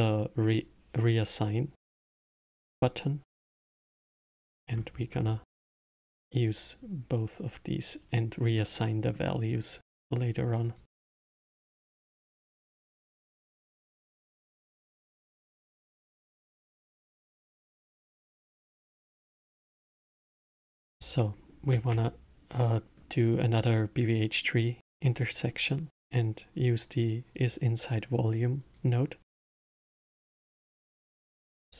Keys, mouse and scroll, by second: 2.5 click, 3.3 click, 4.3-5.1 scroll down 10, 6.4-8.1 drag, 8.6-10.1 middle drag, 10.1 click, 11.5 click, 13.7-16.8 middle drag, 20.1-21.7 middle drag, 21.7 shift+a, 30.5 shift+a.